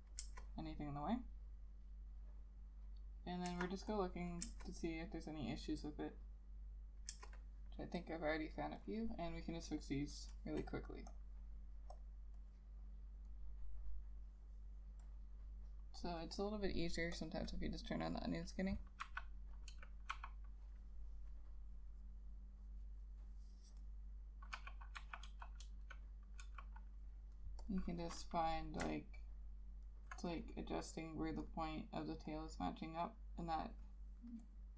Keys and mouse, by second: 0.3 Return, 3.6 Return, 4.5 Return, 7.2 Return, 9.0 double click, 17.3 double click, 19.1 ], 19.8 [, 20.2 ], 24.7-26.5 typing, 28.2 double click, 29.3 alt+click, 30.6 double click.